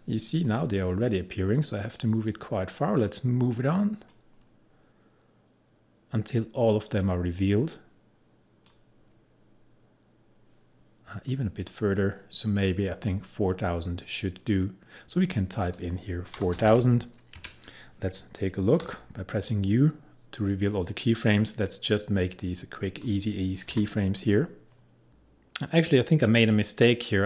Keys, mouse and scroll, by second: 2.3-7.0 drag, 7.0-11.3 drag, 11.3-15.7 drag, 16.2-17.3 typing, 18.9 u, 21.1-23.8 drag, 23.8 F9, 25.1-26.6 drag.